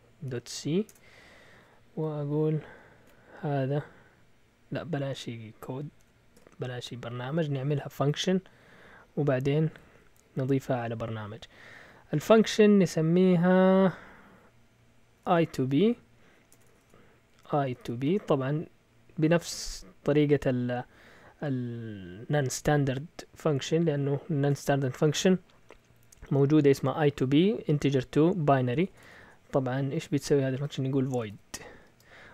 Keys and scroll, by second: 0.0-0.9 typing, 2.7-3.5 typing, 5.9 Escape, 6.3 u, 15.0-18.5 typing, 28.7 BackSpace, 28.9 BackSpace, 29.0 BackSpace, 29.2 BackSpace, 30.4-32.3 typing.